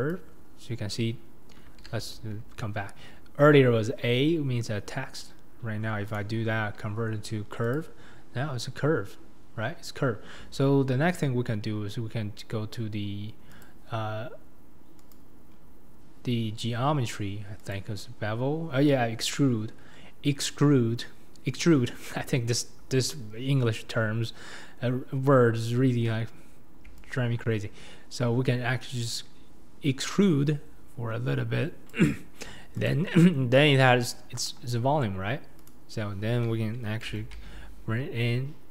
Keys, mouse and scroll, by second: 0.1 right click, 1.9 ctrl+z, 7.8-27.2 right drag, 27.2 click, 32.9 click, 33.0-33.5 middle drag, 33.5 scroll up 1, 33.6 scroll down 3, 33.9-34.4 middle drag, 34.4 KP_7, 35.1-35.7 scroll up 2, 35.7 click, 37.2 g.